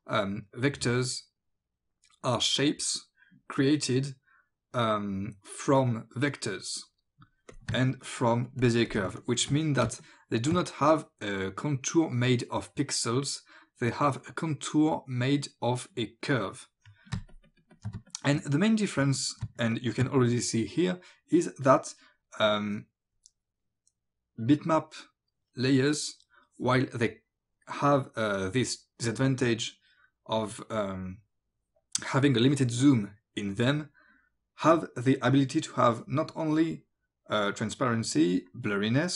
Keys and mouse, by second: 7.5 click, 7.7 ctrl+alt+space, 9.0 ctrl+space, 9.2 click, 10.1 click, 17.2 ctrl+alt+space, 17.9 space, 18.1 click, 19.5 space, 19.7 click.